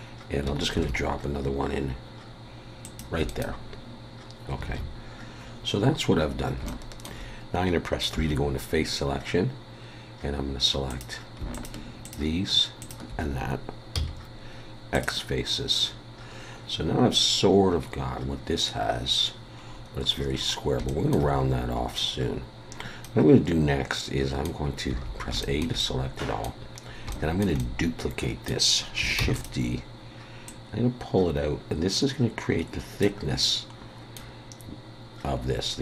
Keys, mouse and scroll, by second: 0.7 ctrl+r, 4.6 alt+a, 6.2 scroll up 2, 6.6 shift+middle click, 8.1 3, 10.9 click, 11.5 shift+click, 13.9 x, 15.8-17.0 scroll down 1, 17.8-19.6 scroll down 1, 19.6-20.3 scroll up 4, 20.3 scroll down 4, 20.9 shift+middle click, 21.4 scroll up 1, 21.9 scroll down 2, 23.0 middle click, 24.9 a, 25.4 shift+middle click, 25.8 middle click, 26.7 scroll up 2, 27.1 shift+middle click, 27.6 middle click, 29.2 shift+d, 30.4 click, 33.4 middle click.